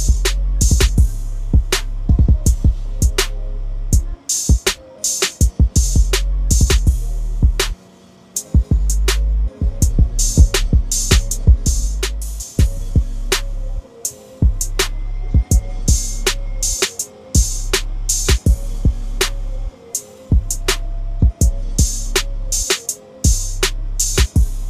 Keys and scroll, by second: 22.6-23.1 typing.